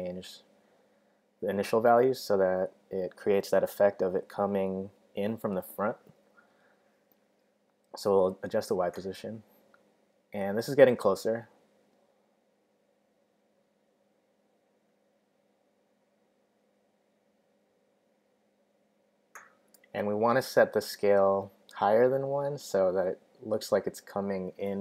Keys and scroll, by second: 0.0-0.3 typing, 14.5 0, 14.6 Tab, 19.5-20.9 typing.